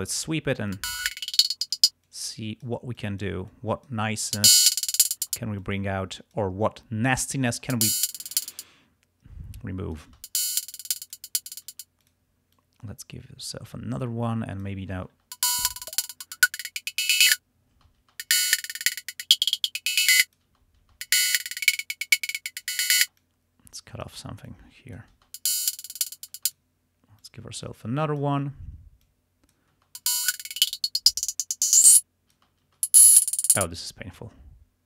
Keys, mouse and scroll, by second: 0.2 space, 0.4 space, 0.8-1.9 drag, 1.8 space, 2.1 click, 3.0 click, 3.5 click, 4.2 space, 4.5 click, 5.3 space, 5.7 click, 7.6 space, 8.5 space, 9.6 click, 10.2 space, 10.8 click, 11.8 space, 12.1 click, 12.6-13.8 drag, 14.1 click, 15.3 space, 17.8-20.6 drag, 17.8 space, 20.5 space, 21.1-22.9 drag, 23.1 space, 25.3 space, 26.4 space, 27.2-28.4 drag, 29.1 click, 29.9 space, 30.1-32.5 drag, 32.4 space, 32.6 click, 32.6 space, 33.6 space, 34.5 scroll up 2.